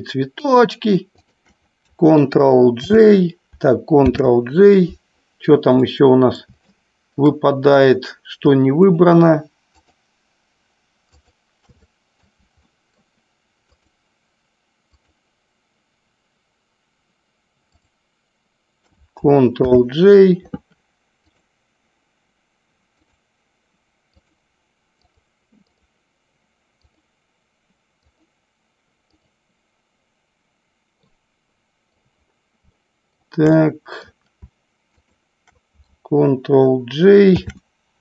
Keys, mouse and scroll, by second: 0.7 shift+click, 1.4 shift+click, 3.0 ctrl+g, 4.3 ctrl+j, 6.0-6.7 middle drag, 6.9-7.4 shift+middle drag, 9.9 shift+click, 12.0-12.4 middle drag, 12.8-13.2 shift+middle drag, 13.9 shift+click, 15.0 shift+click, 18.0 shift+click, 19.9 ctrl+j, 23.2 click, 25.3 click, 25.9 click, 28.3 click, 29.3 click, 31.4-32.2 middle drag, 32.9-33.3 shift+middle drag, 33.8 middle click, 35.2 shift+click, 37.7 ctrl+j.